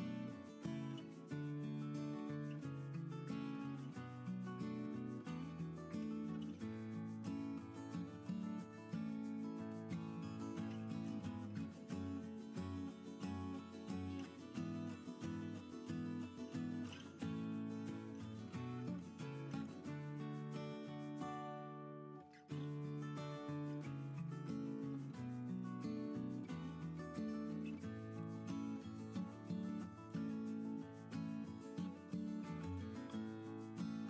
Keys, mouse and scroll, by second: 29.1 ▮.